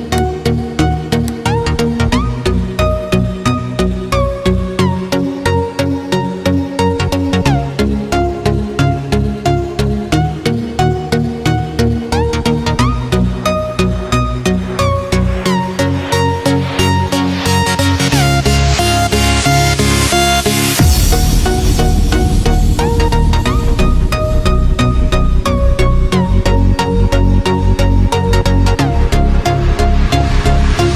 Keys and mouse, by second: 1.0-1.6 middle drag, 1.8 a, 2.6 e, 7.4-10.4 middle drag, 13.0-13.8 drag, 15.8-16.4 middle drag, 18.4 g, 25.9 middle click, 29.1 middle click.